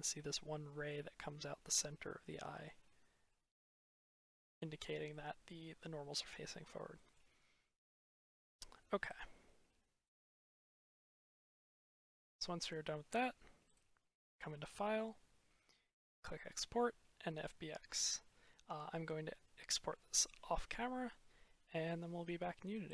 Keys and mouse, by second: 0.4 click, 2.1 click, 2.3-3.2 middle drag, 5.1 middle click, 6.8 drag, 7.3-7.6 middle drag, 8.9-11.1 drag, 11.2 click, 11.6 middle drag, 12.4-12.7 middle drag, 13.6-21.9 drag.